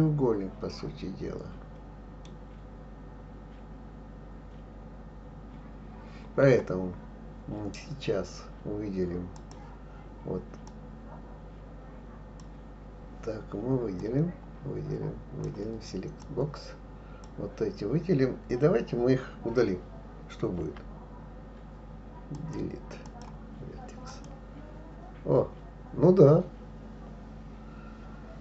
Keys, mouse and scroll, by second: 9.3 click, 10.7 click, 14.0-16.3 drag, 20.6 Delete.